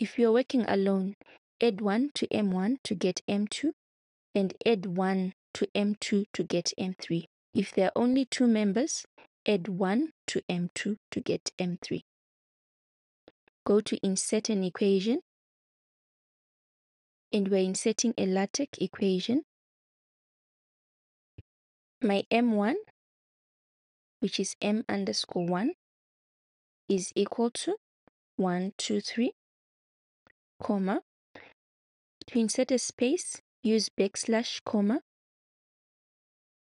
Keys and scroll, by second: 22.2 m, 24.9 shift+-, 25.6 1, 26.9 =, 28.0-29.5 typing, 30.6 '.